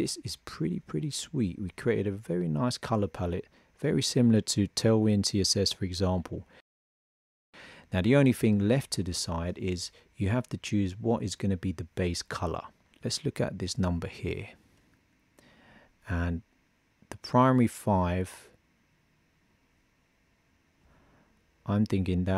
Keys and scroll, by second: 13.7 super+c.